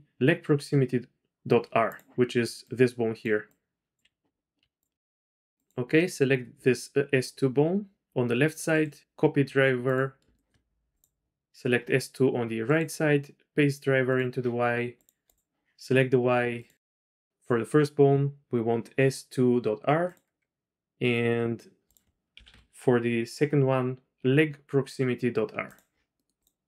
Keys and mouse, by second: 2.5-3.5 d, 2.7 click, 4.1 d, 4.6 q, 5.3 middle drag, 5.6-6.3 drag, 8.8-10.0 drag, 10.4 shift+click, 10.9 click, 12.8-14.5 drag, 14.8-15.5 typing, 15.0 click, 15.2 click, 16.5-20.2 drag, 22.0 click, 26.5 click.